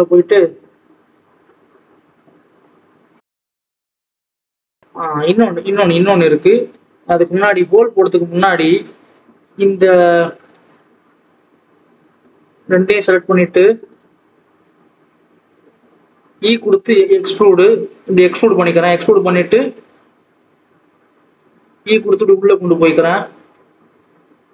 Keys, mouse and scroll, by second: 0.3 ctrl+KP_3, 1.1-1.8 scroll up 4, 1.8 click, 2.1 scroll up 4, 2.4 s, 3.6 click, 3.8 click, 4.0 scroll down 3, 4.2 scroll up 1, 4.2-4.6 scroll down 1, 4.6 click, 4.9-5.7 scroll down 2, 5.7 click, 6.0-6.4 scroll up 1, 6.6 Tab, 6.9 click, 7.1 Tab, 7.3-8.4 scroll up 2, 8.4-8.8 scroll down 1, 8.8 click, 9.2-10.8 scroll down 1, 10.8 click, 13.8-16.2 drag, 16.2 e, 16.9 s, 19.7 s, 21.6 e.